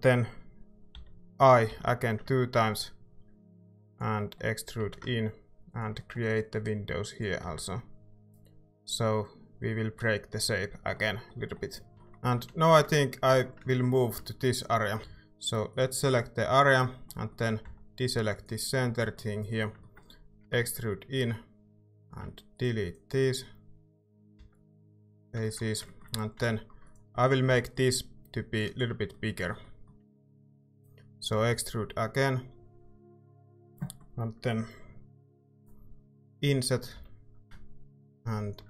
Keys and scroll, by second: 0.9 i, 1.7 i, 4.8 e, 7.5 Tab, 12.4 a, 15.0 Tab, 15.0 ctrl+z, 15.0 a, 17.7 c, 20.5 e, 22.0 a, 24.4 x, 26.4 c, 27.5 c, 31.3 e, 36.3 i, 36.9 i.